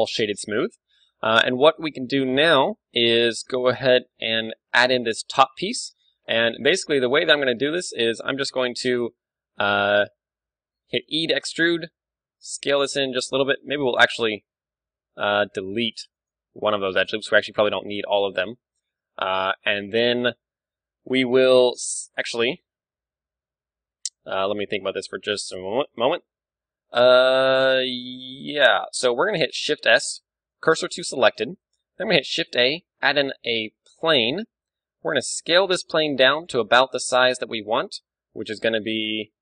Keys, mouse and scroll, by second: 0.0-5.9 middle drag, 3.0 KP_1, 3.6 ctrl+w, 6.2 Tab, 6.7 a, 8.1-9.8 right drag, 8.6-10.1 drag, 9.8-11.4 middle drag, 11.3 e, 12.3-13.4 right drag, 12.3 s, 13.4-15.3 drag, 13.6 a, 16.3-17.9 right drag, 16.6 x, 18.0 KP_7, 18.7-22.0 middle drag, 21.1 a, 22.1-23.8 right drag, 24.7-30.0 middle drag, 29.7 shift+s, 31.4 middle click, 32.1 shift+a, 35.1 s, 36.6-38.1 drag, 36.6 KP_1, 38.1-39.4 middle drag.